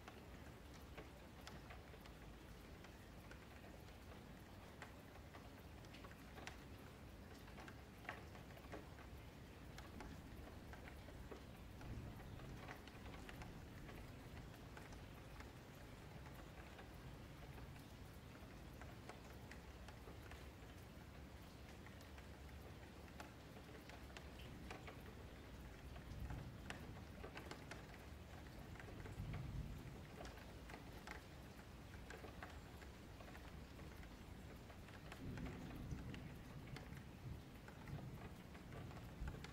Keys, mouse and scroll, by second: 0.5 click, 0.8 shift+click, 1.1 alt+shift+a, 1.7 click, 1.9-2.7 scroll down 4, 2.7-3.3 scroll down 3, 3.3 scroll up 5, 3.8 scroll down 4, 4.1-5.6 shift+middle drag, 5.6 2, 5.8 click, 6.2-7.2 right drag, 7.2 1, 7.6 click, 8.2 shift+click, 8.7 j, 9.0 scroll up 2, 9.3 click, 9.9 scroll down 1, 10.1 shift+middle click, 10.8 scroll down 1, 11.0-13.3 shift+middle drag, 13.3-14.3 scroll up 1, 14.3 k, 17.6 middle click, 18.7 click, 19.0 ctrl+x, 19.3 middle click, 19.8 click, 21.8-23.1 middle drag, 23.1 Tab, 23.2-23.7 scroll up 4, 23.7 click, 24.1 Tab, 24.7 shift+middle click, 25.2 click, 25.6 g, 27.0 shift+click, 27.5 j, 27.8 click, 28.1 2, 28.3 click, 28.8 ctrl+x, 29.2-29.6 scroll down 2, 29.6 1, 30.0 click, 30.3 g, 31.3 click, 31.4 g, 32.8 click, 33.1-33.4 scroll down 2, 33.4 shift+middle click, 34.1-34.8 scroll up 3, 34.8 scroll down 3, 35.0 shift+middle click, 35.7 scroll up 1, 35.9 shift+middle click, 36.7-37.2 scroll up 2, 37.2-38.3 middle drag, 38.3 click, 38.6 shift+click, 38.8 alt+shift+a, 39.2 shift+middle click.